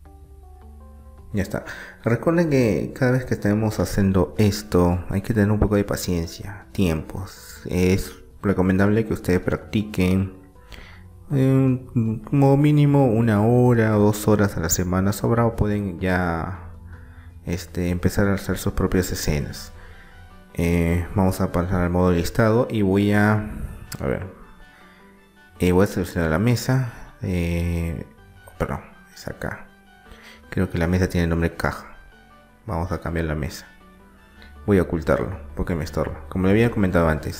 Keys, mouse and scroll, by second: 0.0 s, 2.7-4.7 middle drag, 3.8 s, 8.4-10.3 middle drag, 12.3-14.5 drag, 14.5-16.3 middle drag, 16.0 KP_1, 16.7 middle click, 17.6-19.7 drag, 20.0-22.0 drag, 24.5-26.3 drag, 26.3-28.0 right drag, 27.2-29.0 drag, 29.4-32.6 drag, 34.6-36.4 drag.